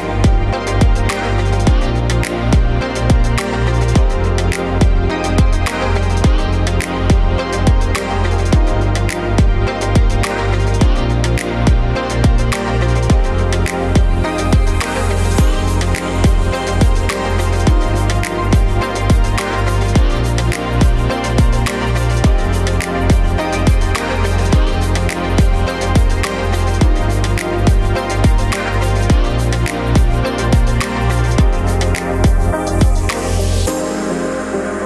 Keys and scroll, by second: 0.0-3.7 typing, 5.8-8.2 typing, 13.9 v, 14.2 ctrl+t, 21.7 ctrl+d, 24.0 ctrl+t, 29.5 Delete, 30.2 m.